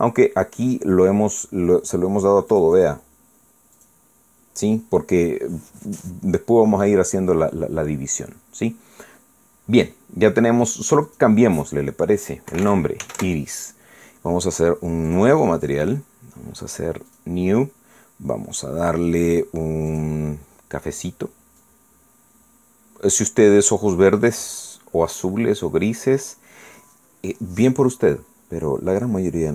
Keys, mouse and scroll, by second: 0.7 click, 3.5 click, 4.8 click, 11.9 click, 13.5 i, 14.0 s, 14.2 Return, 16.1 click, 18.1 click, 20.9 click, 22.6-26.3 drag, 26.3 middle click, 26.6-27.1 scroll down 2, 26.8 middle click, 27.1 middle click, 27.6 scroll down 1, 27.8-29.5 middle drag.